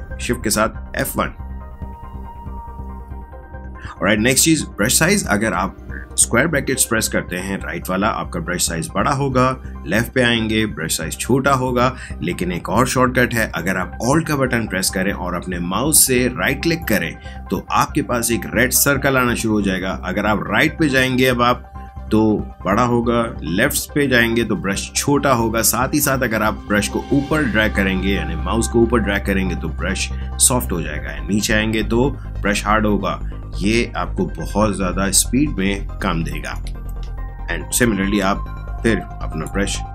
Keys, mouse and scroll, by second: 0.7 shift+F1, 7.5 ], 7.7 ], 7.9 ], 9.5-10.5 typing, 12.7 typing, 16.3 typing, 16.8 alt+right click, 37.7-39.9 drag.